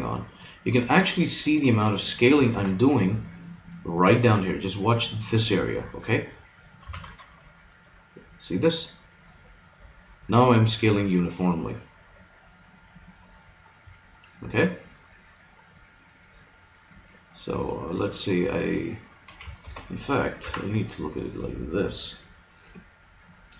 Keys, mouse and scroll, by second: 6.8 s, 20.4 KP_3.